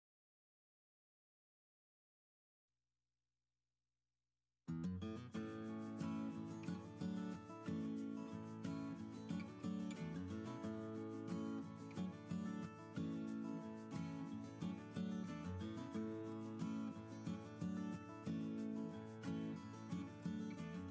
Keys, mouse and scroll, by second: 1.1-1.6 middle drag.